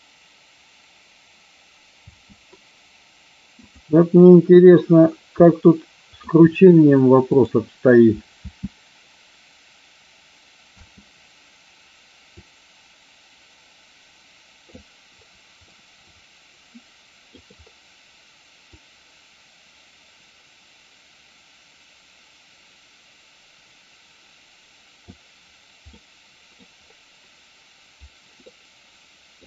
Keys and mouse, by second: 2.1 space, 3.6 click, 5.3-6.2 middle drag, 7.3 click, 8.5 space, 10.7 space, 12.3-14.7 drag, 15.7-17.3 shift+middle drag, 18.7-25.1 drag, 25.8-26.6 middle drag, 28.3-29.4 middle drag.